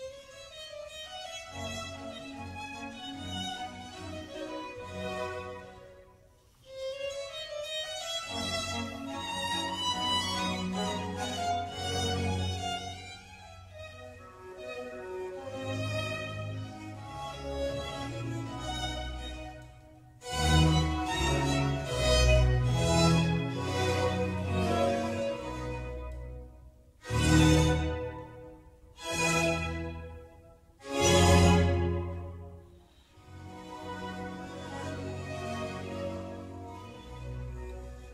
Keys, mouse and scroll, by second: 0.9 click, 4.5-5.8 drag, 7.5 click, 8.4 click, 8.7-9.1 scroll down 4, 9.1 scroll up 1, 9.2-11.2 scroll down 11, 11.3-11.6 drag, 11.6-12.9 scroll down 7, 12.9-16.0 drag, 17.3 click, 17.7-18.6 middle drag, 18.6-19.4 scroll up 1, 19.4-19.8 scroll down 1, 19.8 click, 20.2-21.3 middle drag, 21.3 s, 23.1 scroll up 2, 23.3-25.0 middle drag, 25.0 g, 31.3 click, 31.8 Tab, 32.4 Tab, 32.8-33.5 middle drag, 33.5 scroll down 1, 33.7-36.8 middle drag, 37.3 click, 37.8 click.